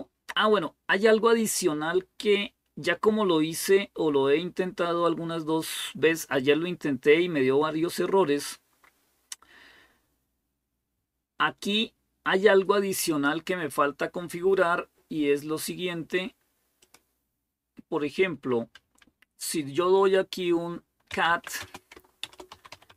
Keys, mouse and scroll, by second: 11.8-12.8 scroll down 1, 12.9 click, 16.6 click, 20.7-22.9 typing.